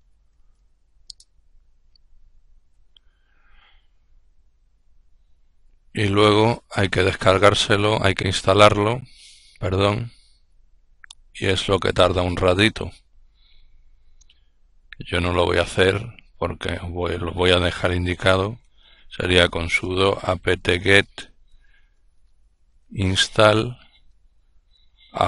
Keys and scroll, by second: 0.0-0.8 typing, 17.8-22.9 typing, 24.1-25.2 typing.